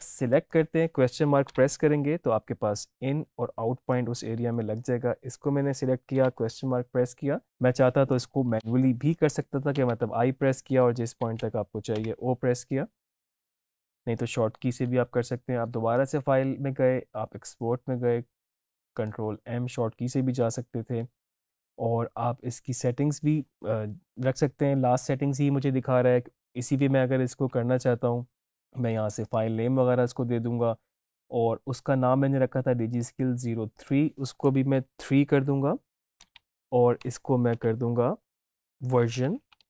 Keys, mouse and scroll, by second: 3.8-6.0 drag, 10.6 click, 14.1 click, 18.8 click, 20.4 click, 20.9 click, 29.2 click, 32.8 click, 33.0 click, 34.6 Right, 37.0 space, 37.4 shift+9, 38.8-39.6 typing.